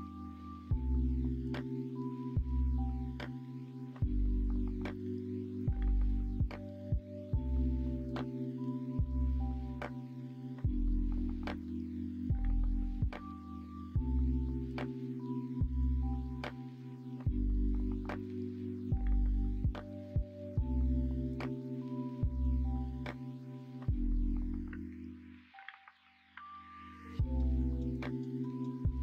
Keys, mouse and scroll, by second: 4.3-6.7 middle drag, 7.7 Tab, 8.4 alt+z, 11.4 click, 12.3 alt+z, 12.6 middle click, 13.5 Tab, 14.1 Tab, 14.6-15.7 middle drag, 16.0 middle click, 16.9 middle click, 18.9 middle click, 19.8 middle click, 20.2 shift+middle click, 20.6 middle click, 21.0 shift+middle click, 21.6 middle click, 22.0 middle click, 22.5 shift+middle click, 23.3 middle click.